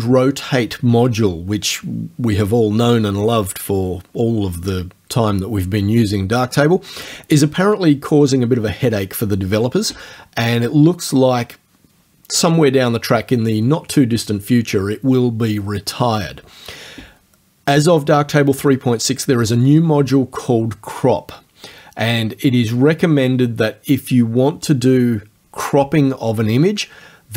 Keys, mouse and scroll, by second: 22.2 click.